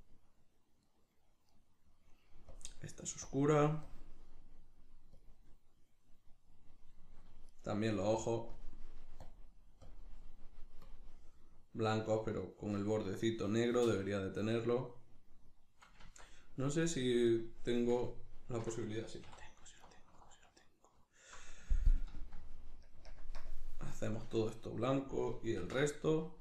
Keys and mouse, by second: 0.9 right click, 1.5 right click, 2.5-7.1 drag, 7.1 shift+middle click, 7.5 right click, 8.5-13.3 drag, 17.3 click, 18.1-19.8 ctrl+middle drag, 19.3 3, 19.8-22.9 alt+right drag, 22.9 ctrl+KP_Add, 23.4 ctrl+KP_Subtract, 25.6 ctrl+i.